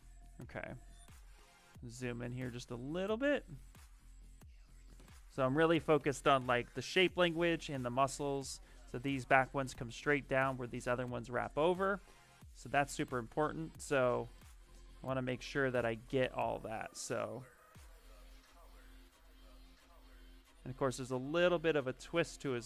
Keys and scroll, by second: 1.2 ctrl+=, 1.6 ctrl+=, 11.1 alt+Tab, 15.5 s, 21.4 alt+Tab, 22.3 alt+Tab.